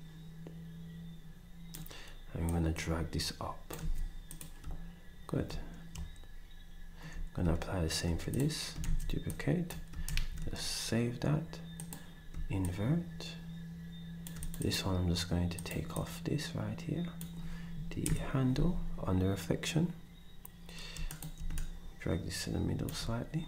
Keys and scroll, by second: 3.8 s, 8.8 d, 10.0 s, 18.0 Delete, 18.5 s.